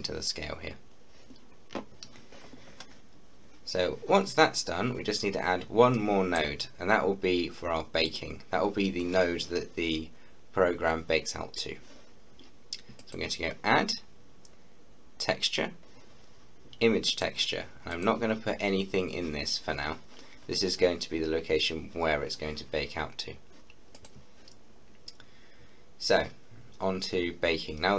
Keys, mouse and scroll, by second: 4.4-6.0 scroll down 1, 6.0 middle click, 6.7-8.0 scroll up 1, 8.0 click, 13.0 click, 13.0 typing, 17.1 click, 23.9 click, 27.6-27.9 scroll down 1.